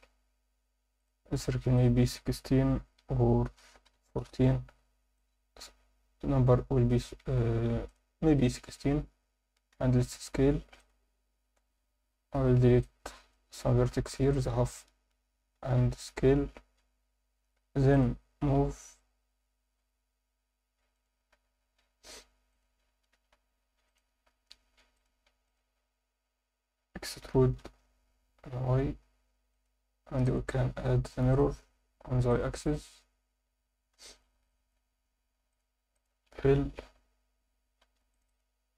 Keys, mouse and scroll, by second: 1.0 click, 1.8-4.2 drag, 5.1-6.9 drag, 7.9 click, 8.9 Tab, 9.7 s, 10.8 click, 11.4 alt+a, 12.3 b, 13.5 x, 15.8 s, 17.9 click, 18.4 g, 18.6 y, 20.9 click, 21.3 s, 22.5 click, 23.1 g, 23.3 y, 23.9 click, 24.2 scroll up 1, 24.9 click, 24.9 scroll up 1, 25.4 shift+click, 27.2 e, 27.6 y, 29.5 click, 30.2-31.4 drag, 32.3 click, 32.6 click, 33.3 Tab, 33.4 scroll up 2, 33.6 Tab, 34.0 alt+shift+middle click, 34.5 ctrl+alt+middle click, 35.5 shift+click, 35.9 shift+click, 36.9 f, 37.8 ctrl+r, 38.3 click.